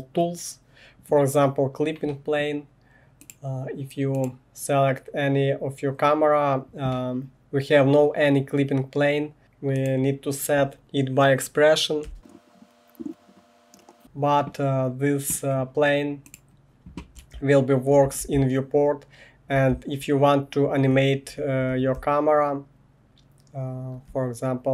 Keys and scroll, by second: 10.8-14.2 typing, 13.0 ctrl+c, 13.2 Right, 16.9-19.7 typing, 21.9-24.7 typing.